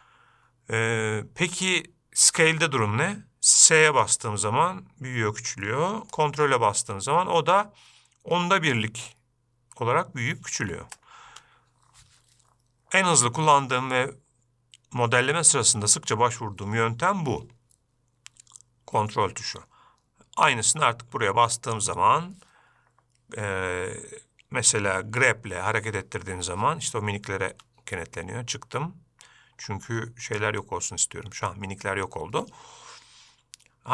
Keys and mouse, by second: 22.1 click, 25.6 g.